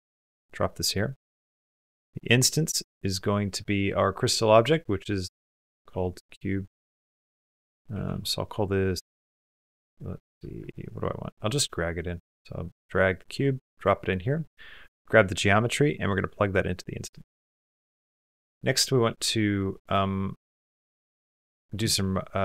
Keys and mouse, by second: 0.1 typing, 0.6 click, 2.1-9.9 drag, 7.1 BackSpace, 13.8 click, 14.5-16.3 drag, 17.8 middle click, 18.1 middle click, 19.5 middle click.